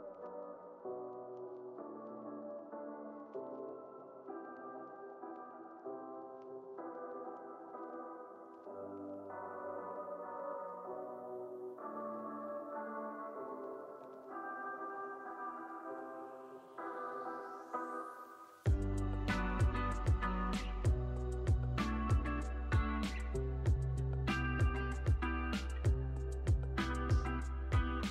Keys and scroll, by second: 1.0 9, 1.3 8, 2.2 Return, 3.5 z, 4.3 x, 5.1 z, 5.9 x, 7.7 super+c, 7.8 super+v, 9.4 super+c, 9.6 super+v, 11.8 x, 12.7 z, 13.1 x, 15.0 super+c, 15.1 super+v, 21.3 z, 22.6 x.